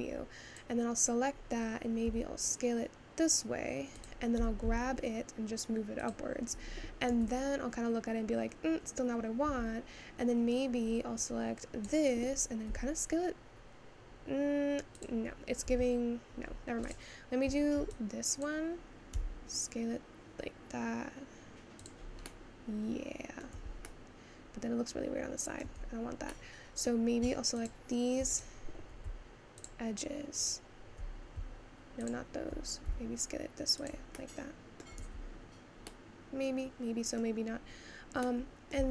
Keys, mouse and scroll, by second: 0.6 click, 2.2 s, 7.2 Tab, 9.6 Tab, 10.7-11.3 scroll down 1, 11.9 click, 12.8 s, 15.7 ctrl+z, 16.9 click, 18.4 click, 19.2 s, 22.3-26.0 middle drag, 26.0 Tab, 26.4-27.7 middle drag, 27.7 shift+click, 29.8 shift+click, 30.6 shift+click, 32.9 s, 34.3 middle click, 35.2 Tab, 36.0-38.9 middle drag.